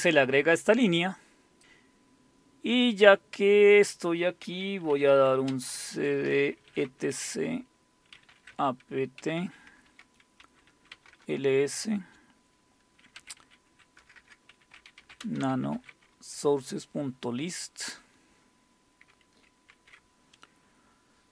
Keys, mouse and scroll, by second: 4.7-11.1 typing, 12.9-16.3 typing, 18.8-19.5 typing, 19.7 super+w, 20.9-21.3 scroll up 1.